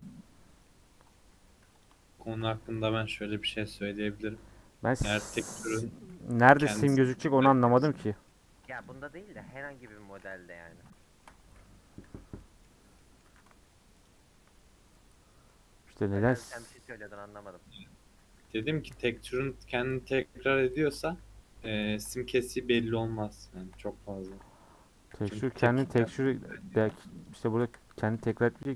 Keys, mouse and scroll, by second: 0.6-1.8 middle drag, 1.8 click, 2.3 shift+click, 2.7 a, 3.5 u, 4.3 middle click, 4.8 Tab, 5.0 scroll down 4, 5.2-6.4 middle drag, 6.4 /, 6.9-7.3 scroll down 2, 7.3 h, 7.5-8.8 middle drag, 8.8 click, 9.1-10.3 middle drag, 10.3 Tab, 11.0-12.0 shift+middle drag, 12.0 /, 12.4 middle click, 12.6-13.0 scroll up 3, 13.0 middle click, 13.2 2, 14.0 alt+click, 15.3 scroll down 2, 15.5-16.3 middle drag, 16.3 a, 17.5 u, 18.4 Tab, 19.9 /, 20.7-21.1 middle drag, 21.1 h, 21.8 ctrl+z, 22.2-23.7 middle drag, 23.7 Tab, 24.1 Tab, 25.1 h, 25.6-26.1 shift+middle drag, 26.1 click, 26.4 scroll down 1, 26.6-27.3 shift+middle drag, 27.3 click, 27.4 middle click, 27.7 Tab, 28.2 a.